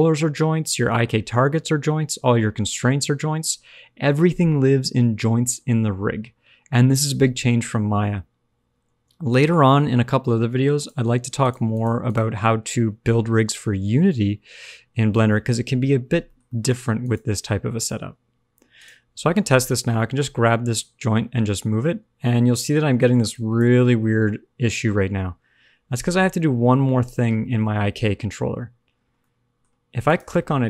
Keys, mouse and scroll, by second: 10.7 click, 11.3 click, 11.7 click, 12.0 click, 16.3 shift+middle click, 16.9 middle click, 16.9 click, 17.7 click, 18.7 click, 19.4 scroll down 1, 19.6-20.7 scroll up 1, 20.7 g, 24.0 g, 29.0-30.0 scroll down 2, 29.1 middle click, 30.0 click.